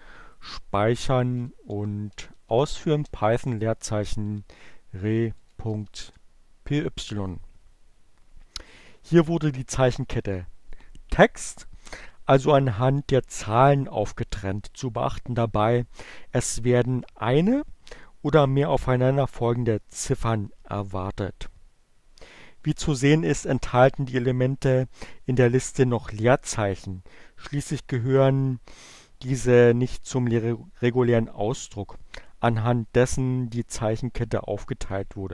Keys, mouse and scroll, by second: 0.1 click, 0.3-2.9 typing, 4.2-5.1 typing.